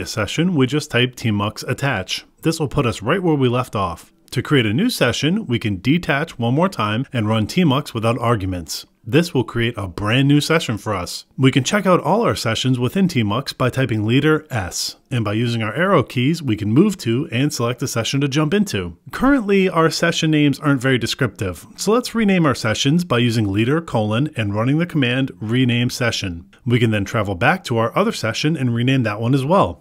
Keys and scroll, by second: 2.1 Return, 4.0 ctrl+s, 6.0 ctrl+b, 8.4 Return, 12.5 Up, 12.8 ctrl+b, 16.0 Return, 17.5 ctrl+b, 26.0 Return, 27.6 ctrl+b, 28.1 Return, 29.5 ctrl+b.